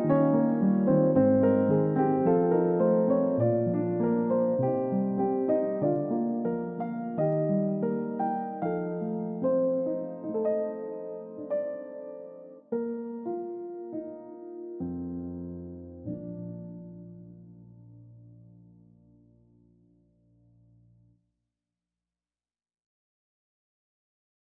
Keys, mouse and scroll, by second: 12.2-14.3 scroll down 1, 14.3 middle click, 15.9 scroll up 1, 16.0 middle click, 16.4-16.9 scroll down 1, 16.9-17.3 scroll up 1, 17.3 middle click, 19.7 ctrl+d, 21.2-21.6 scroll up 1, 21.6 double click.